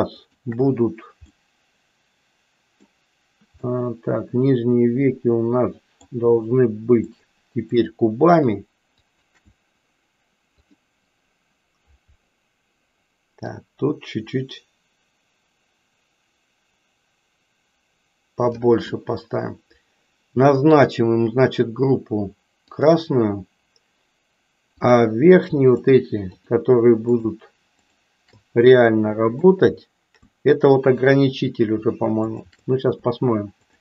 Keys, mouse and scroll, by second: 0.3 shift+click, 1.4-3.0 middle drag, 3.7-6.1 middle drag, 7.1 shift+click, 7.7 shift+click, 8.4 shift+click, 9.1 shift+click, 10.8 click, 13.3-18.4 drag, 22.7 click, 25.8 shift+click, 26.3 shift+click, 27.2 shift+click, 27.8 shift+click, 28.7 middle click, 32.2 shift+click, 33.6 shift+click.